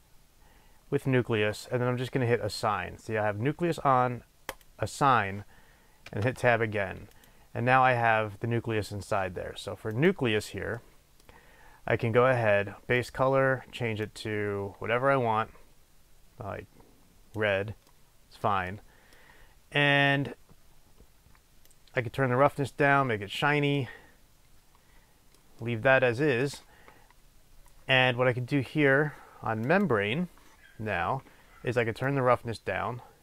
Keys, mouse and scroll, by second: 4.6 click, 6.2 Tab, 7.1 click, 10.9-13.0 middle drag, 11.4-13.0 scroll up 2, 13.0 click, 17.9-21.8 middle drag, 21.8-23.8 drag, 23.8-29.7 middle drag, 29.7 click, 32.1-33.2 drag.